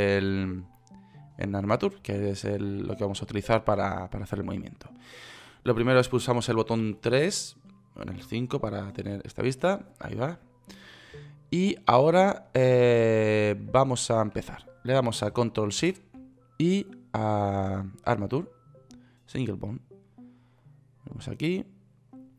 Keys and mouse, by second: 7.2 KP_3, 8.6 KP_5, 16.1 shift+a.